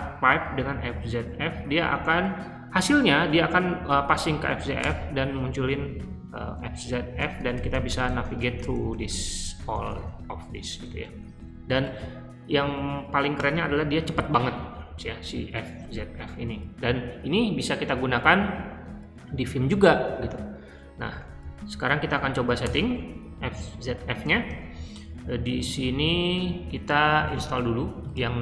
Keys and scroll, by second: 0.0-1.4 typing, 4.7 Return, 6.7 Up, 7.1 Up, 7.3 Up, 7.4 Up, 7.6 Up, 7.8 Up, 8.0 Up, 8.1 Up, 8.3 Up, 8.5 Up, 8.6 Up, 8.8 Up, 9.0 Up, 11.7 q, 13.3 BackSpace, 14.0 ctrl+d, 21.2 Up, 21.6 Up, 22.1 Up, 22.6 Return, 24.3 g, 25.3-26.1 typing.